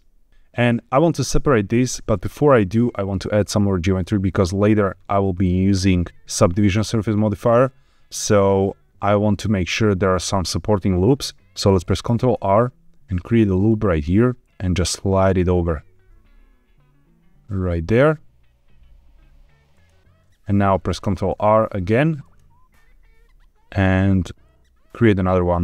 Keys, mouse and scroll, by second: 0.3 shift+click, 5.0-8.1 scroll up 1, 12.0 ctrl+r, 19.6 click, 20.9 ctrl+r.